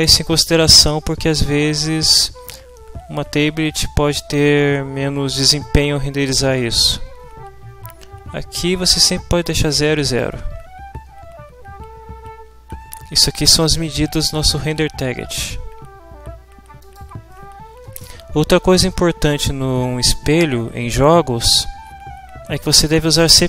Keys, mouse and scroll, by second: 9.4 click, 10.1 click, 11.0 Return, 16.8 click.